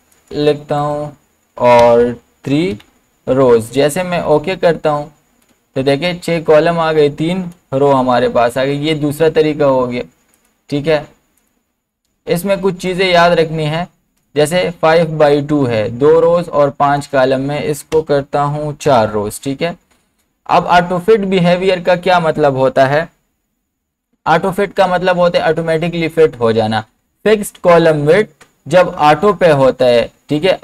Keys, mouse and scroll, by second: 0.1 click, 1.8 BackSpace, 4.3 click, 7.5 click, 8.7 ctrl+z, 10.4 click, 17.0 click, 17.0 click, 17.9 BackSpace.